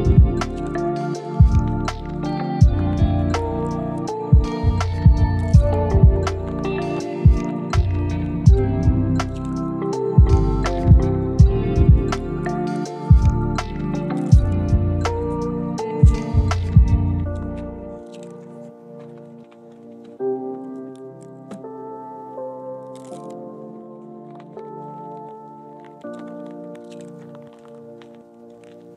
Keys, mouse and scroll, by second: 0.3 click, 1.0 click, 1.4 g, 2.0 click, 2.4 g, 3.0 click, 3.2 g, 3.6 click, 3.8 scroll down 3, 4.0 shift+middle click, 4.2-5.2 middle drag, 5.4 click, 5.6 middle drag, 6.0 KP_7, 6.6 g, 7.7-8.9 middle drag, 9.1 click, 9.5 KP_7, 9.9 click, 10.3 g, 11.1 click, 11.3 scroll down 2, 11.3 scroll up 1, 11.5-12.5 middle drag, 12.6 middle click, 13.3 click, 13.4 shift+click, 14.0 KP_7, 14.6 g, 17.2 middle click, 18.0 middle click, 18.4 scroll up 2, 18.5 middle click, 18.8 scroll down 1, 19.2 click, 19.4 shift+click, 20.0 KP_1, 20.3 scroll up 2, 20.7 g, 22.3 middle click, 22.8 scroll down 1, 22.9 middle click, 23.9 KP_1, 24.3 scroll up 1, 24.6 g, 25.3 middle click, 25.8-26.3 scroll down 3, 26.0-28.4 middle drag.